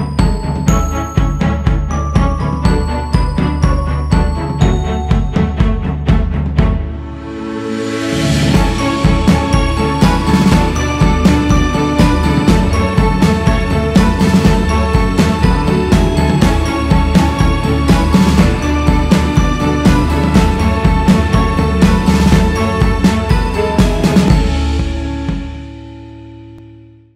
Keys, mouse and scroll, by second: 0.8 click, 1.8 scroll down 1, 3.3-9.3 drag, 10.3 click, 11.4-16.8 drag, 18.8 click, 19.2 click, 20.9 click, 24.0 click.